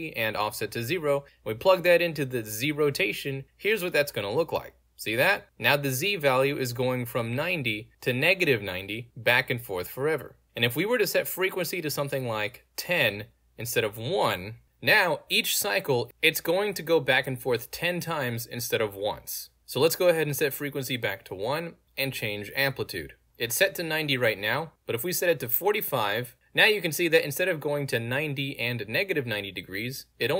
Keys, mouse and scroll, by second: 1.8 click, 4.7 w, 4.7 alt+z, 10.6 click, 11.8 click, 12.6-13.9 typing, 19.5 d, 20.0 click, 20.6 click, 21.4 1, 21.8 click, 22.6 click, 24.0 click, 25.6 5, 26.3 alt+z.